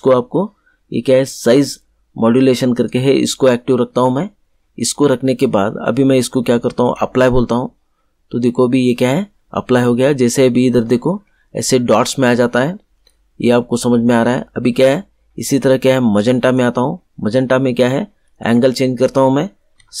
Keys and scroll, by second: 19.7 7.